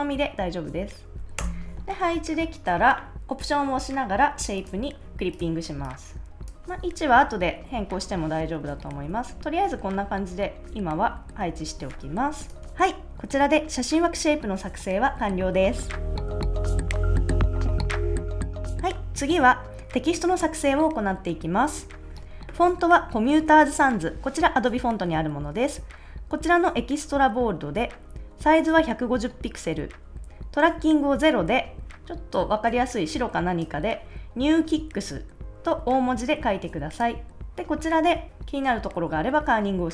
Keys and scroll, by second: 1.3 Return, 6.9 Right, 7.6 Up, 8.0 Left, 8.6 Down, 9.3 Up, 9.7 Left, 9.9 Up, 10.6 Left, 10.9 Up, 11.2 Left, 11.4 Up.